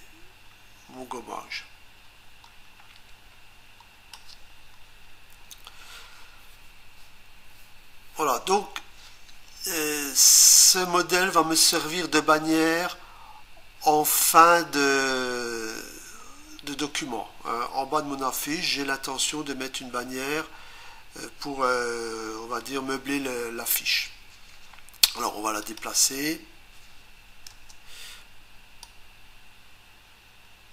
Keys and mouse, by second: 14.4 click, 25.6 click, 27.5 Return, 28.8 click.